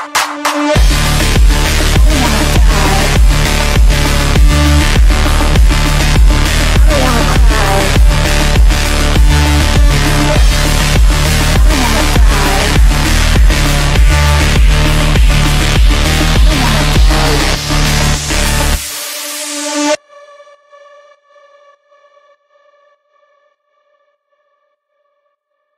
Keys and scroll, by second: 0.2 Escape, 2.0 ctrl+g, 2.8 c, 3.4 shift+F2, 3.7 Escape, 4.3 shift+Page_Down, 4.7 Escape, 5.4 shift+Page_Down, 5.7 w, 7.2 F3, 8.4 Delete, 11.0 shift+F2, 12.5 shift+F2, 12.9 F3, 13.8 Escape, 22.0 f, 24.3 d.